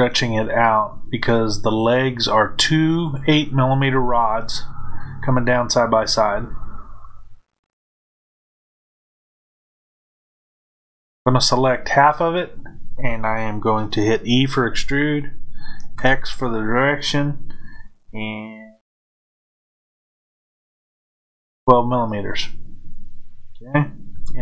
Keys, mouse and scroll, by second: 7.0-24.2 middle drag, 24.2 KP_Enter.